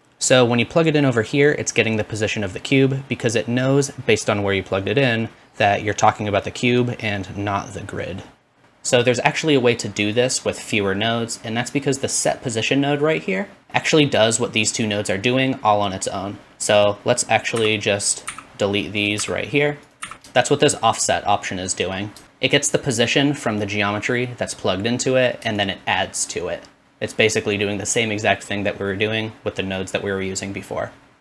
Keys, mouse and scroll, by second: 0.0-8.6 drag, 0.0-10.3 middle drag, 0.0-8.6 right drag, 10.3-16.8 drag, 16.8-18.1 middle drag, 17.8 x, 18.1 click, 18.3 x, 19.1 middle click, 19.2 x, 19.8 click, 20.0 shift+middle click, 20.0 x, 20.4-31.2 shift+drag.